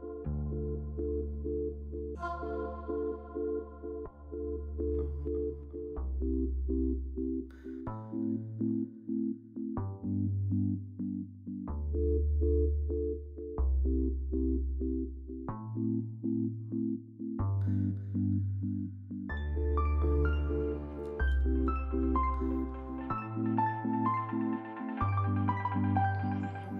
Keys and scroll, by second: 0.0 2, 6.9 s, 7.4 s, 18.8 s, 24.4 s, 26.6-26.7 typing.